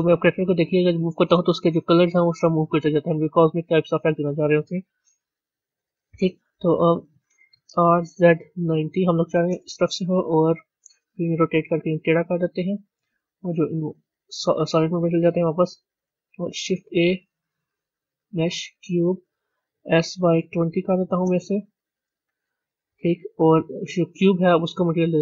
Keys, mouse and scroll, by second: 0.5 g, 4.9 KP_1, 7.6 r, 13.0-15.2 middle drag, 15.2 z, 15.5-16.4 scroll down 1, 17.1 shift+a, 20.1 s.